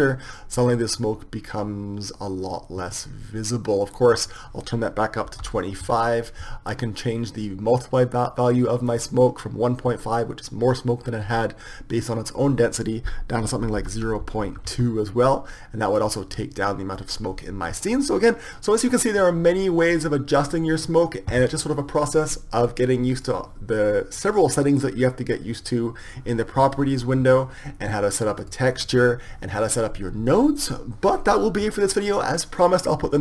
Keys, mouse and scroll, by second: 5.2-6.8 drag, 8.9-10.4 drag, 23.1-25.0 drag, 28.5-30.5 drag.